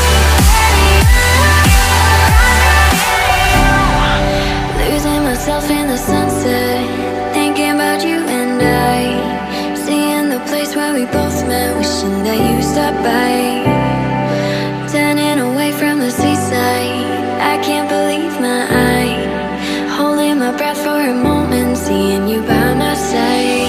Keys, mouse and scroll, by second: 1.6 ctrl+scroll down 1, 2.5 double click, 4.5 double click, 5.8-6.5 ctrl+scroll up 1, 6.5 ctrl+scroll down 1, 22.1 right click.